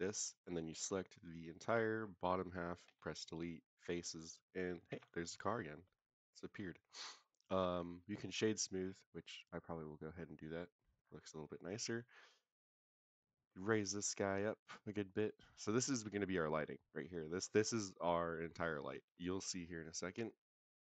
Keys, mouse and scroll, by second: 0.0 click, 0.4-1.7 drag, 2.8 Delete, 4.9 Tab, 5.3-5.8 middle drag, 5.9 scroll up 1, 6.5-6.9 middle drag, 6.5 scroll up 1, 6.9-8.4 scroll down 3, 7.6-8.4 right drag, 9.1 right click, 10.1-10.8 middle drag, 10.9-11.5 scroll up 3, 11.4-11.9 middle drag, 12.5 scroll down 3, 12.8 middle click, 14.1-15.6 drag, 15.9 s, 16.5 click, 17.0 scroll down 2, 17.2 middle drag, 17.9 middle click, 18.7 middle drag, 19.1 scroll up 2.